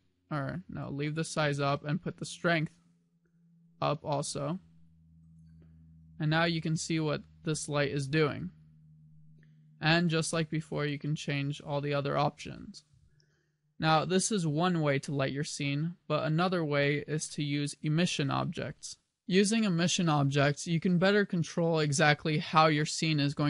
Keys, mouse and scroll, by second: 2.1 click, 6.2 g, 11.1 click, 13.9 KP_1, 19.0 n.